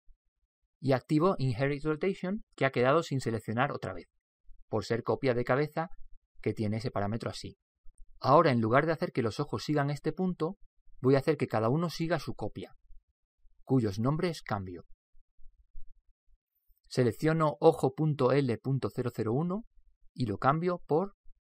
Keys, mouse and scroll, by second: 3.4 click, 18.4 right click, 20.7 click.